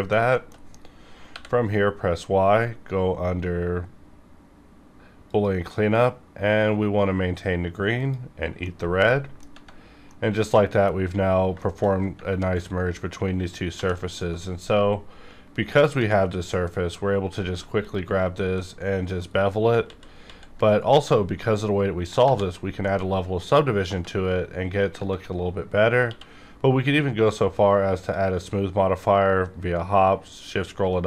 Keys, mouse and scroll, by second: 0.3 middle click, 0.4 shift+middle click, 0.6-1.2 shift+scroll up 3, 1.2 y, 7.4 click, 8.0 click, 8.3 scroll down 1, 8.6 middle click, 8.7 middle click, 10.0-11.6 middle drag, 11.6 shift+middle click, 11.6 shift+middle click, 12.0 scroll up 1, 12.2 scroll down 1, 12.3 scroll up 1, 13.7 2, 14.0 alt+click, 15.2 scroll down 1, 15.6 b, 16.5-17.8 scroll up 1, 17.8 click, 18.2 scroll down 1, 18.5 middle click, 19.3 scroll down 1, 19.9 ctrl+z, 21.1 scroll up 1, 22.2 ctrl+1, 22.8 middle click, 22.9 middle click, 26.0 q, 28.0 click, 30.1 shift+scroll up 1.